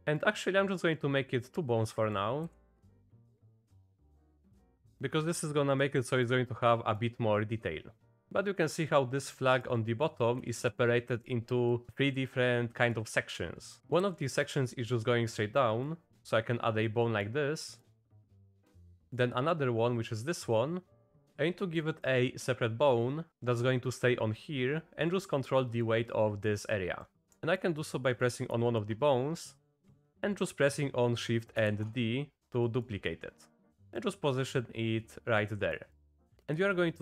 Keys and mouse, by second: 0.3 click, 1.9 click, 2.4 e, 4.2 click, 4.9 click, 5.7 click, 6.1 click, 6.8 click, 7.5 click, 8.4 click, 9.3 middle click, 11.0 middle click, 12.9 middle click, 14.0 e, 16.0 click, 17.0 click, 17.7 click, 18.4 click, 19.0 shift+click, 21.0 click, 21.3 ctrl+z, 21.5 click, 23.1 click, 25.8 click, 27.0 click, 27.5 click, 28.7 shift+click, 31.7 shift+d, 33.8 click, 34.5 click, 35.5 click, 35.9 click.